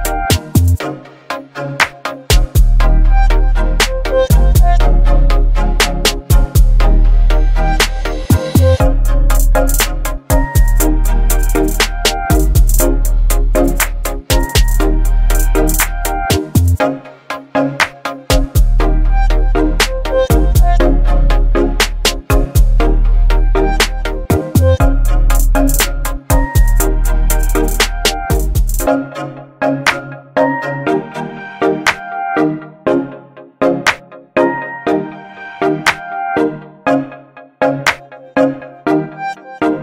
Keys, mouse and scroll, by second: 1.3 shift+click, 3.0 ctrl+g, 5.8 ctrl+g, 6.0-9.7 alt+drag, 11.4 BackSpace, 13.3 click, 16.8 ctrl+t, 19.5 ctrl+t, 19.6-22.4 shift+drag, 23.2 Return, 23.8 ctrl+0, 28.2 shift+click, 30.0-35.6 alt+drag.